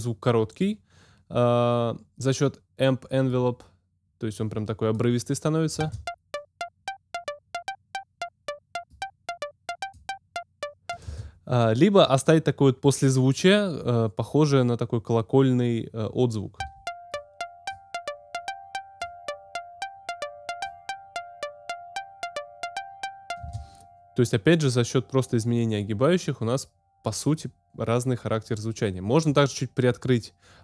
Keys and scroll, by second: 5.8 space, 11.0 space, 16.6 space, 23.4 space.